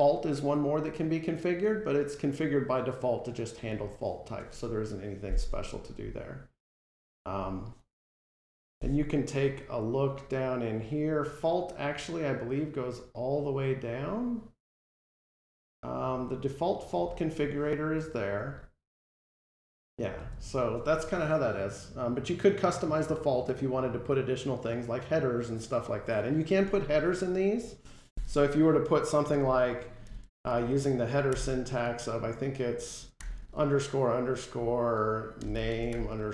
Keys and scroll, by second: 8.2 F12, 20.0 ctrl+Tab.